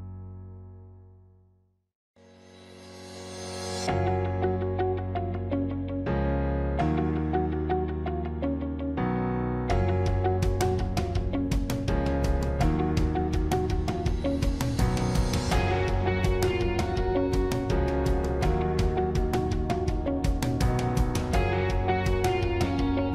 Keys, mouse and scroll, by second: 2.5 ctrl+-, 3.3 ctrl++, 3.7 ctrl++, 6.3 ctrl++, 8.5 ctrl+-, 8.6 ctrl++, 11.2 ctrl++, 14.8 ctrl+-.